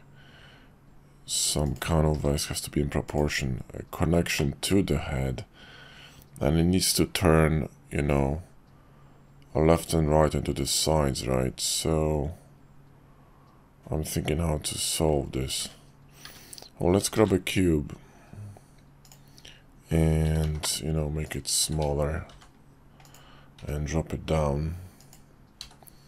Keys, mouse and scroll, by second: 2.1 g, 4.4-15.1 middle drag, 16.2 `, 17.1 shift+a, 20.2 s, 21.6 s, 23.6 g, 25.6 s.